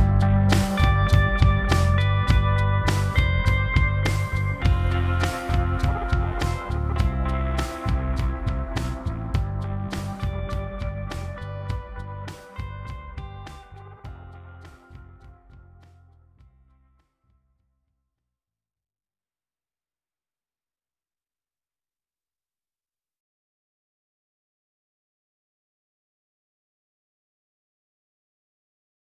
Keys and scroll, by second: 4.2 ctrl+z, 7.1 ctrl+z, 17.9 ctrl+t.